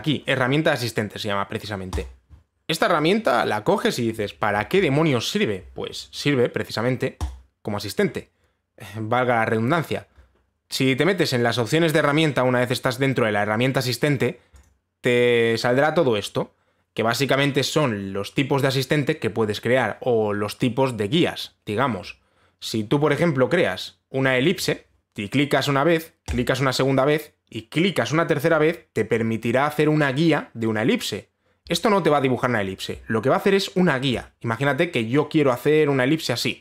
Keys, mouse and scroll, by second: 2.6 click, 7.9 click, 15.3 click, 25.0 click, 27.0 click.